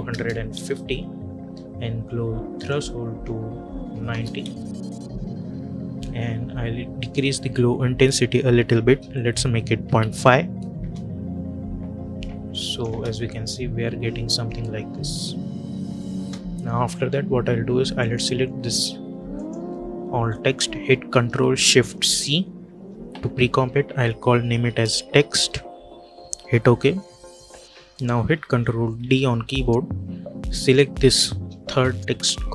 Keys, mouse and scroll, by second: 0.4 Return, 2.4 click, 4.3 Return, 6.9 click, 10.7 Return, 12.4 click, 12.8 space, 16.0 space, 17.9 click, 19.2 shift+click, 22.1 ctrl+shift+c, 24.5-25.8 typing, 26.3 Return, 27.8 click, 28.9 ctrl+d, 30.5 click.